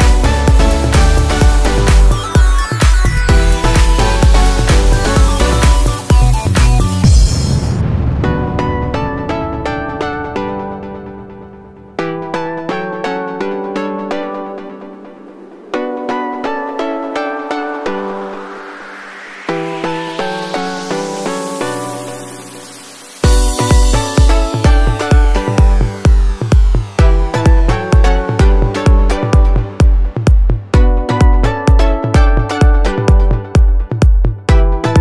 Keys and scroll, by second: 0.1 ctrl+t.